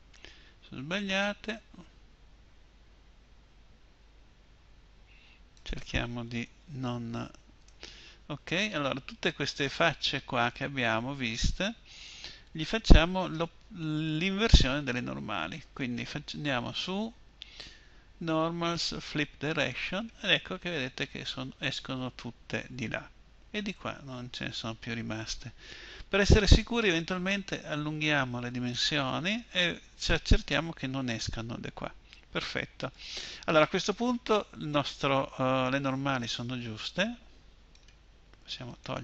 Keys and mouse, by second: 8.8-9.8 middle drag, 10.6-13.0 middle drag, 15.7-19.7 drag, 20.8-22.3 middle drag, 29.3-31.3 middle drag, 33.5 middle click.